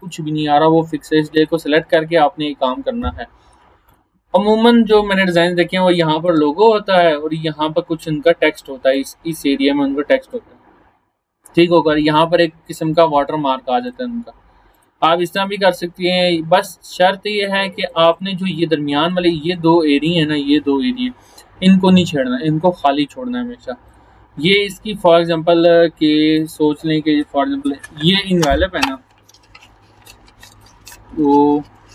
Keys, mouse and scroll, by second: 3.9-6.3 drag, 8.9-10.5 drag, 19.5 shift+click, 22.9-23.5 scroll down 1, 23.9 click, 24.9-26.1 scroll up 1.